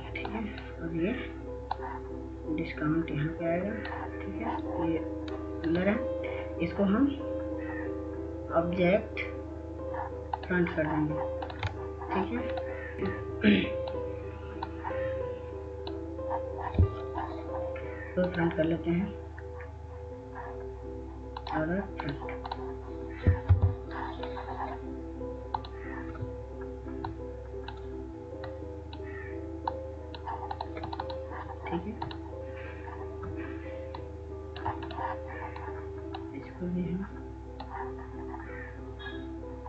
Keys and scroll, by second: 12.9 BackSpace, 24.9 F2.